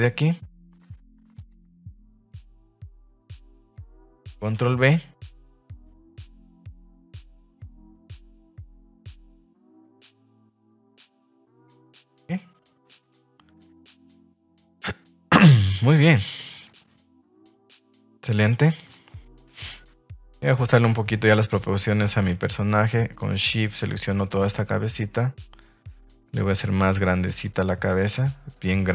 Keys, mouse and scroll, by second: 0.0 alt+right click, 1.3 alt+shift+right click, 1.8 middle drag, 2.6 alt+shift+right click, 3.1-3.7 middle drag, 4.5 ctrl+b, 10.0 Tab, 10.2 middle click, 10.6-11.6 middle drag, 11.7 shift+middle click, 11.9 middle click, 12.3-13.9 middle drag, 14.5 KP_1, 15.3 KP_3, 16.0 ctrl+s, 16.5 shift+middle click, 17.4-17.8 middle drag, 18.3 middle click, 18.5 shift+middle drag, 18.8 middle click, 19.4 KP_3, 19.9 ctrl+s, 20.2 shift+middle click, 21.0 shift+middle click, 22.0 right click, 23.1 shift+right click, 23.6 shift+right click, 24.1 s, 28.5 click.